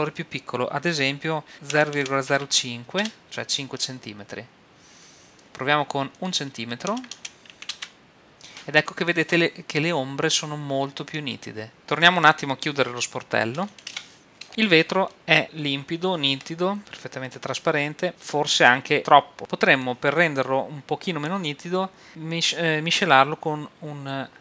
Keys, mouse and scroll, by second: 6.2-8.0 drag, 9.8-11.7 middle drag, 12.2-14.0 right drag, 13.5 click, 14.3 right click, 14.5 middle click, 15.5-16.8 middle drag, 19.4-21.6 drag.